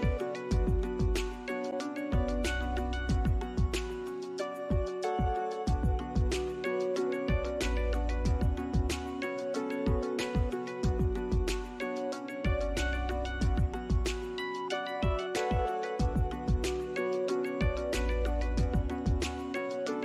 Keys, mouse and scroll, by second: 0.1 alt+scroll up 1, 1.5 double click, 3.2 alt+click, 4.1 right click, 12.0 scroll up 1, 14.6 right click, 16.0 scroll up 1, 16.3 alt+click, 16.7 alt+right click, 18.6 alt+click.